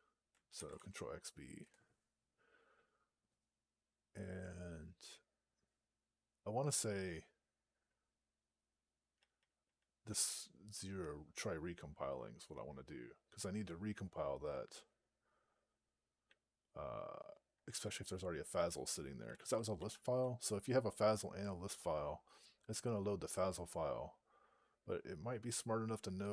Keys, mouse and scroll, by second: 1.5 Return, 9.0 Down, 9.2 Down, 9.5 Down, 9.9 Down, 16.1-17.2 Right, 17.5 Down, 18.4-19.1 Right, 19.3 Left, 19.6 Left, 19.7 Left, 20.0 Left.